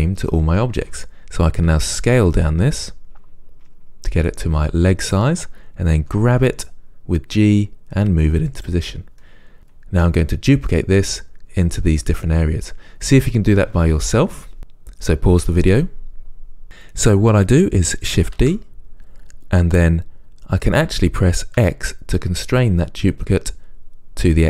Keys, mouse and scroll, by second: 1.9 s, 5.3 click, 6.2 g, 18.6 shift+d.